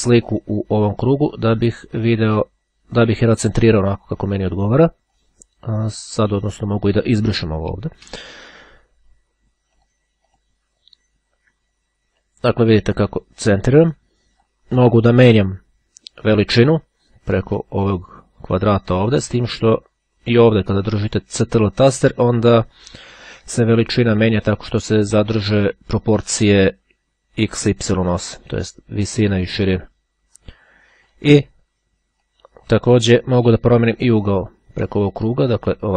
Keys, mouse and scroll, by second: 6.8 click, 7.5 Delete, 9.9 click, 12.4-15.1 drag, 17.2-31.7 drag, 32.3-33.5 drag, 34.1-35.9 drag.